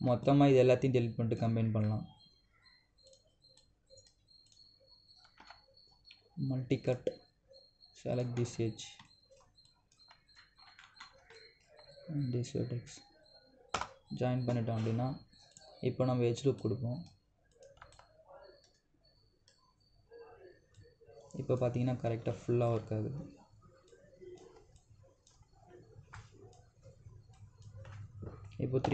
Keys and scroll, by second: 6.1 ctrl+Delete, 14.5 Return.